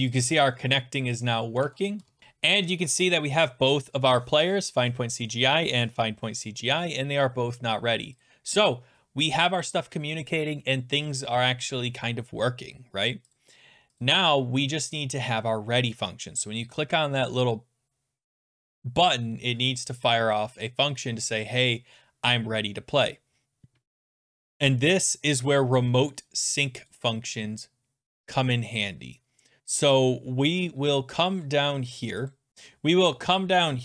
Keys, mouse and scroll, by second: 0.2 click, 1.2 click, 1.6 alt+Tab, 2.1 alt+Tab, 8.3 click, 14.0 click, 24.3 click, 24.5-25.4 scroll down 7, 25.4 scroll down 3, 26.9 click, 27.3 scroll down 4, 27.4-28.1 scroll, 28.1-28.7 scroll, 28.7 scroll, 30.9-31.2 scroll, 32.3 click, 32.6-33.8 scroll.